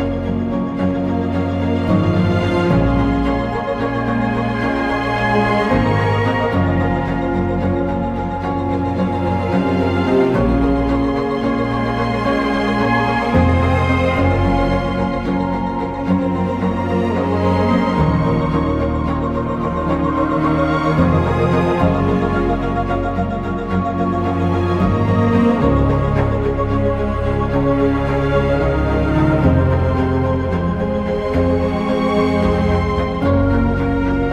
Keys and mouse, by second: 0.0 ctrl+x, 3.4 1, 3.8 click, 4.2 shift+click, 6.0 shift+click, 6.9 j, 7.8 click, 8.4 shift+click, 9.3 j, 10.4 click, 10.8 shift+click, 11.7 j, 14.5 2, 15.0 right click, 15.9 1, 17.7 j, 18.6 shift+click, 19.4 j, 19.9 click, 20.3 shift+click, 21.1 j, 23.1 j, 25.3 j, 26.1 click, 27.1 j, 27.9 click, 29.1 j, 29.5 click, 30.7 j, 32.9 j, 33.5 click.